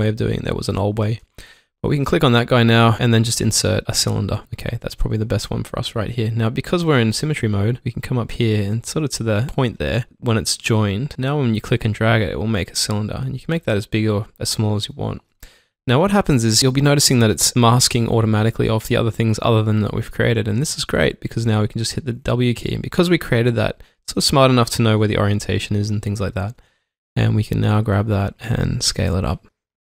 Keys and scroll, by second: 20.1 alt+Num_Lock, 21.4 typing.